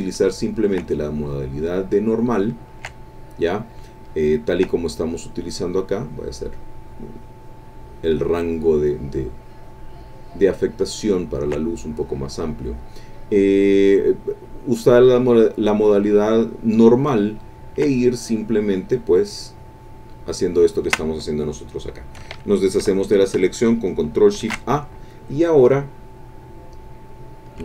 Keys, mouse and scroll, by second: 0.7-2.6 ctrl+drag, 2.7 ctrl+click, 3.1 ctrl+click, 4.3 ctrl+click, 4.8-10.7 ctrl+drag, 11.3-17.1 ctrl+drag, 17.5-20.6 ctrl+drag, 20.7 ctrl+middle click, 21.5 click, 24.3 ctrl+shift+a.